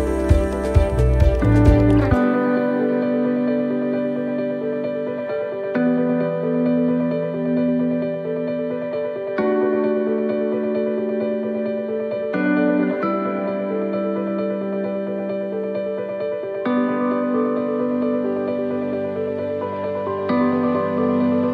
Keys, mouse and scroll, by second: 2.0 middle click, 3.3 middle click, 4.6 click, 6.6 middle click, 8.7 middle click, 11.3 shift+middle click, 11.5 shift+middle click, 12.0-12.4 scroll up 1, 12.5 shift+middle click, 13.6 middle click, 14.4 right click, 15.8 alt+shift+right click, 17.9 shift+middle click, 18.5 scroll down 2, 19.2 shift+middle click, 19.7-20.1 scroll down 3, 20.1 shift+middle click, 20.7 scroll down 2, 21.2 shift+middle click.